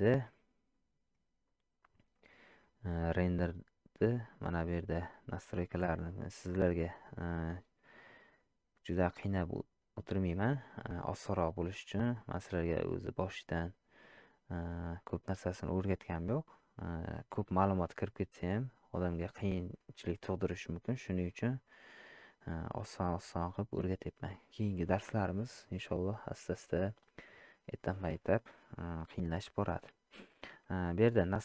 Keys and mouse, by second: 6.9 click, 8.0 click.